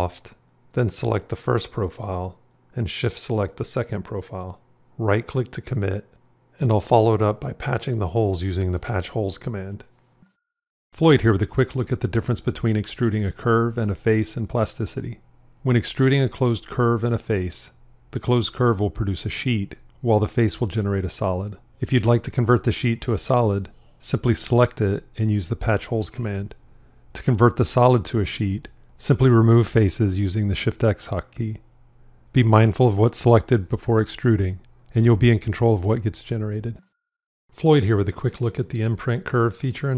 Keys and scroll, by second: 28.7 shift+x.